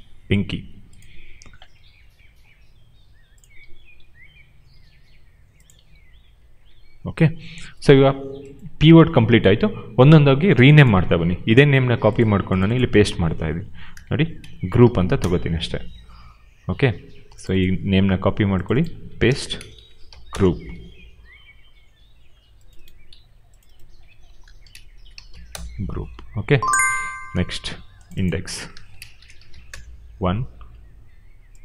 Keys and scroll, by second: 1.5 d, 3.6 d, 11.7 ctrl+c, 13.1 ctrl+v, 13.9-15.3 typing, 18.0 ctrl+c, 19.1-20.4 typing, 23.0 ctrl+c, 24.3-25.6 typing, 27.1 ctrl+c, 28.4 ctrl+v, 28.6-29.9 typing.